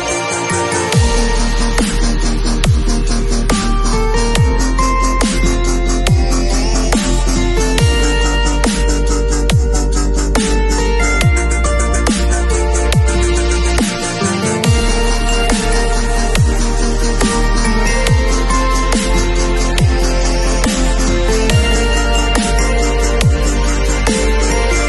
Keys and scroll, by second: 0.5 space, 7.3 b, 16.1 ], 20.2 v.